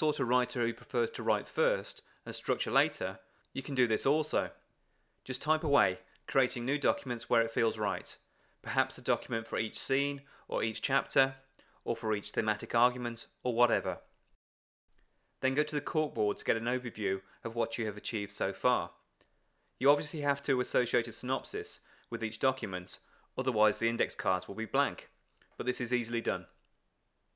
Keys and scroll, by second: 11.9 super+v, 22.0 alt+shift+super+v.